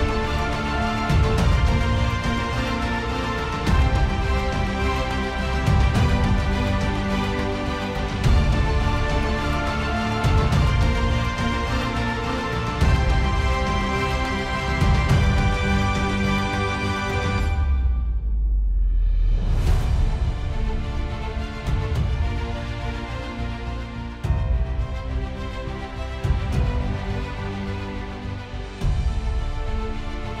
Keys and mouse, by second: 5.1 middle click, 9.6 ctrl+d, 11.1 alt+middle click, 12.1 alt+middle click, 15.6 alt+middle click, 19.1 Delete, 20.1 alt+middle click, 21.7 alt+middle click, 26.2 ctrl+z.